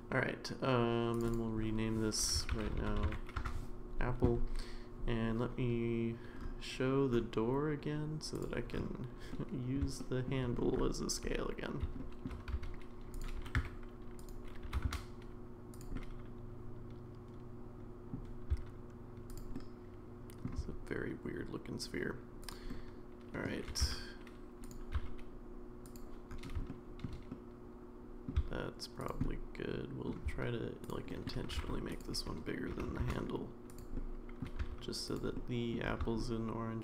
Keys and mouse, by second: 1.1 click, 1.3-3.9 drag, 2.8 p, 8.4 click, 9.3-9.8 middle drag, 10.0 shift+middle drag, 12.0 shift+middle drag, 12.5 s, 13.4 g, 14.6 g, 15.9-18.1 middle drag, 18.5 s, 19.5-20.5 middle drag, 20.6 s, 22.7-23.4 middle drag, 23.7 g, 26.5 s, 26.7 shift+middle click, 27.3 middle click, 28.4 s, 29.2 middle click, 30.2 s, 31.1 middle click, 31.5 g, 32.7 g, 33.9 middle click, 34.6 s, 35.4-35.7 middle drag, 36.2-36.8 middle drag.